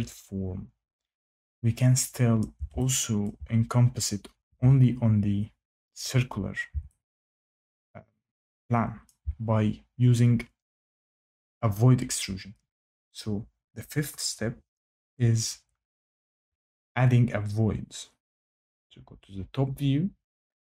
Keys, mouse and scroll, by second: 2.3 shift+right click, 3.2 shift+click, 9.0 shift+middle click, 18.5 click.